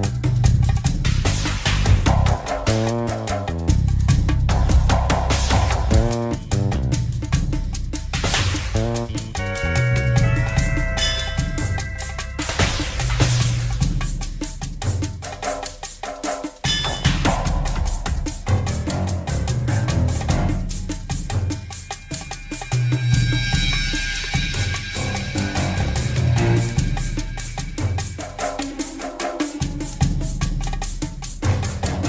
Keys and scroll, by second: 15.0 x, 15.5 r, 18.2 w.